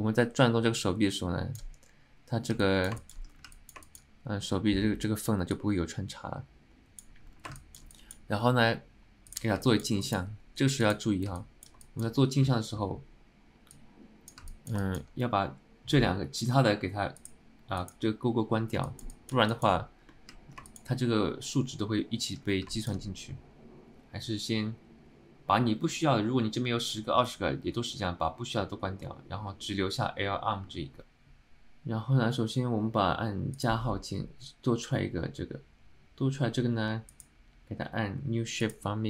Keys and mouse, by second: 2.7 middle click, 3.1 shift+middle click, 3.6 middle click, 4.0 shift+middle click, 5.7-7.3 drag, 7.7 shift+middle drag, 8.0 alt+middle click, 9.8 middle click, 10.1 alt+shift+middle click, 10.9 click, 11.5-11.8 alt+middle drag, 11.9 shift+middle drag, 13.9 click, 14.8 alt+click, 14.9 shift+middle drag, 17.3 click, 17.9 click, 18.9 shift+middle drag, 19.2 alt+middle click, 19.6 alt+shift+middle click, 20.2 alt+middle click, 20.8 shift+middle click, 22.8 alt+shift+middle click, 37.2-38.9 drag.